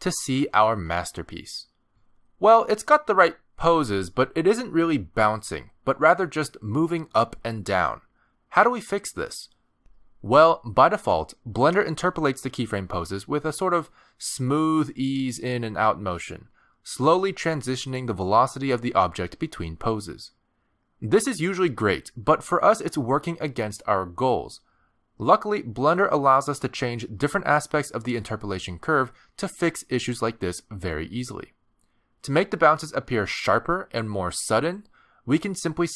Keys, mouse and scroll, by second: 0.3 space, 2.5-3.0 scroll down 2, 3.1 shift+middle click, 3.5-3.9 scroll down 1, 3.9 middle click, 4.6 middle click, 35.6 space.